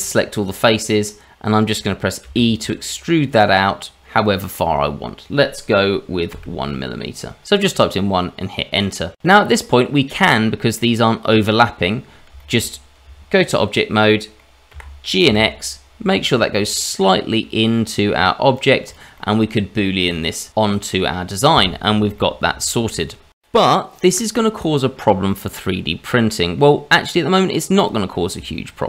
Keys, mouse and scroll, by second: 0.3 middle click, 2.2 e, 8.0 middle click, 8.4 shift+middle click, 8.7 middle click, 10.3 middle click, 12.0 middle click, 12.0 scroll down 2, 12.4 shift+middle click, 13.0 Tab, 14.0 middle click, 14.7 g, 18.6 click, 18.9 middle click, 19.5 shift+middle click, 19.8 scroll up 1, 20.1 middle click, 22.4 middle click, 22.8 shift+middle click, 24.8-25.3 scroll down 2, 25.3 middle click, 27.7 click.